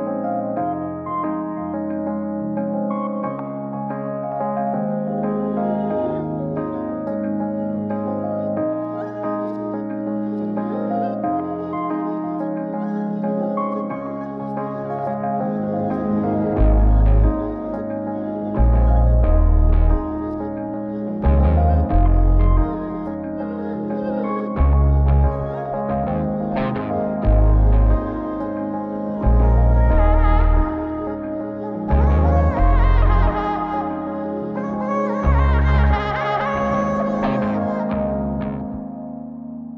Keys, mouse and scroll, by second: 2.2-5.3 drag.